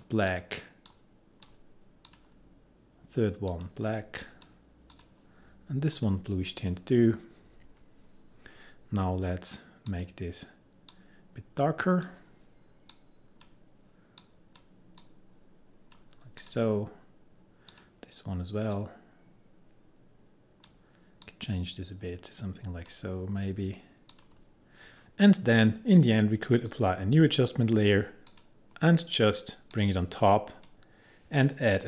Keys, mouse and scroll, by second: 10.0-24.2 drag, 26.8-31.8 drag.